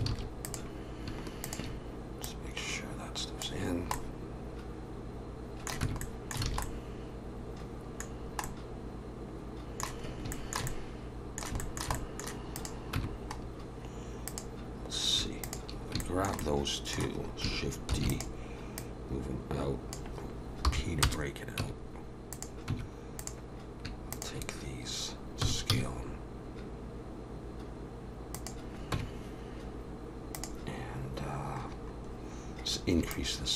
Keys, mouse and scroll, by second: 0.1 alt+a, 0.5 click, 1.4 shift+click, 2.2 click, 3.9 middle click, 5.8 Tab, 6.0 middle click, 6.5 alt+a, 6.6 middle click, 8.1 scroll down 2, 8.4 middle click, 10.1 scroll up 2, 10.3 shift+middle click, 10.7 middle click, 11.6 shift+middle click, 12.0 middle click, 12.5 click, 12.9 Tab, 13.4 scroll up 1, 14.3 click, 15.4 shift+click, 16.0 shift+middle click, 16.4 middle click, 17.9 shift+d, 18.8 click, 20.7 p, 21.6 Tab, 22.3 click, 22.7 Tab, 23.2 click, 24.1 shift+click, 25.4 s, 28.9 Tab, 30.3 click, 31.7-32.1 scroll down 4, 33.0 scroll down 3, 33.1 shift+click.